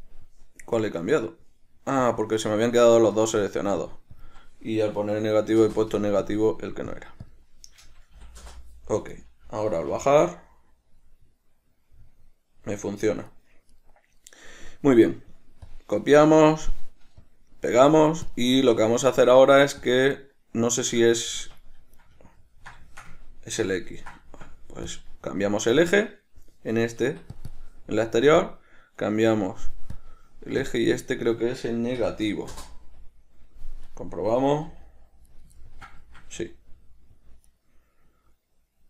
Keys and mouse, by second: 0.2 click, 2.3 click, 4.1-6.6 drag, 6.0 Return, 7.2-9.4 drag, 8.8 Return, 9.4 right click, 10.2 g, 14.0 right click, 15.3-18.5 right drag, 18.5 drag, 20.1-22.7 drag, 21.7 Escape, 22.7-25.2 ctrl+middle drag, 25.2-27.7 drag, 27.4 Escape, 28.7-34.1 drag, 32.8 Return, 34.1 right click, 35.0 g, 35.6 right click, 35.9-37.8 ctrl+middle drag, 36.6 g, 37.8 right click.